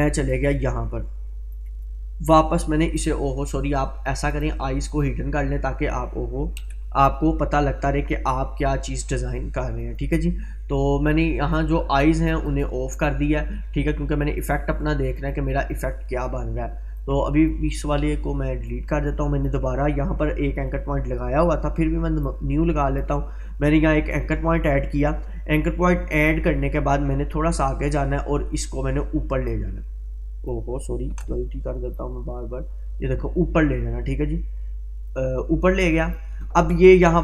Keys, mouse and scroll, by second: 6.6 ctrl+z, 9.8 click, 17.6 Delete, 18.7-19.6 drag, 21.2 Delete, 22.3-23.2 drag, 29.8-30.7 click, 31.2 ctrl+z, 32.2-36.3 drag.